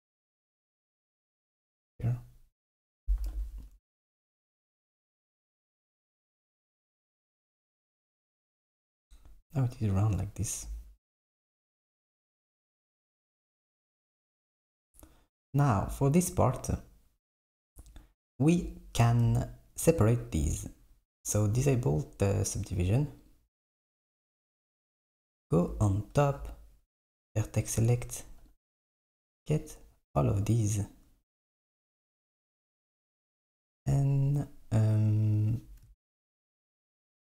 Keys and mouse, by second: 0.5 g, 3.3 KP_7, 4.7 KP_3, 7.8 click, 17.9 click, 21.4 click, 22.7 click, 23.3 click, 24.7 KP_7, 27.3-28.7 drag.